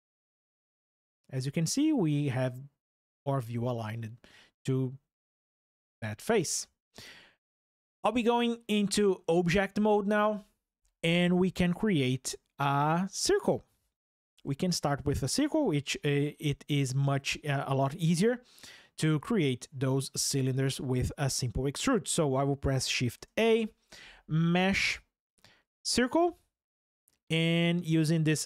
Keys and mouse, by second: 0.5 click, 5.2 shift+KP_7, 8.3-9.3 drag, 22.8 shift+a.